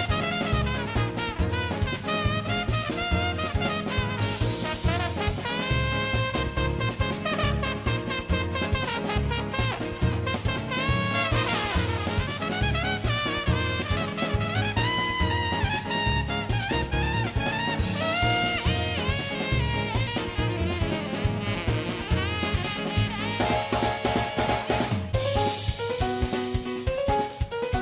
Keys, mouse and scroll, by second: 0.7 alt+q, 0.7 middle click, 1.1 middle click, 1.5 KP_7, 1.7 1, 2.2 click, 2.4 right click, 3.1 click, 3.5 shift+middle click, 3.5 f, 3.6 click, 4.0 middle click, 4.0 f, 4.1 middle click, 4.5 middle click, 5.0 click, 5.3 middle click, 5.4 middle click, 5.7 middle click, 5.9 middle click, 6.1 middle click, 8.3 middle click, 8.7 ctrl+click, 9.0 middle click, 9.2 scroll down 1, 9.4 middle click, 9.5 middle click, 9.6 middle click, 9.7 scroll up 1, 9.8 middle click, 9.9 middle click, 10.5-11.8 drag, 11.0 ctrl+f, 11.4 ctrl+f, 11.8 middle click, 12.2 ctrl+z, 12.3 g, 12.8 g, 12.8 middle click, 13.4 g, 14.6 middle click, 14.8 alt+q, 15.0 g, 15.1 s, 15.3 middle click, 15.5 ctrl+KP_1, 15.7 e, 15.9 middle click, 16.2-17.4 drag, 17.6 middle click, 17.8 middle click, 18.0 click, 18.4 middle click, 18.9 ctrl+r, 18.9 middle click, 19.2 middle click, 19.2 f, 19.3 middle click, 20.9 middle click, 20.9 g, 22.4 shift+click, 23.1 middle click, 23.1-25.5 typing, 23.5 middle click, 23.7 click, 24.4 middle click, 24.6 click, 24.8 middle click, 24.9 middle click, 25.2 middle click, 25.5 middle click, 25.7 middle click, 25.9-26.9 middle drag.